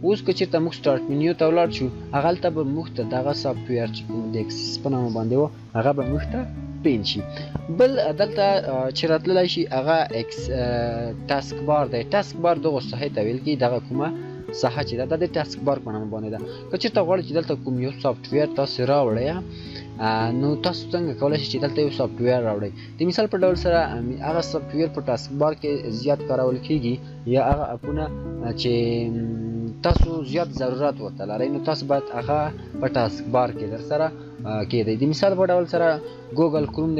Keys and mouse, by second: 13.8 click, 13.9-16.7 shift+drag, 21.5 shift+click, 21.6 shift+click, 36.5 right click.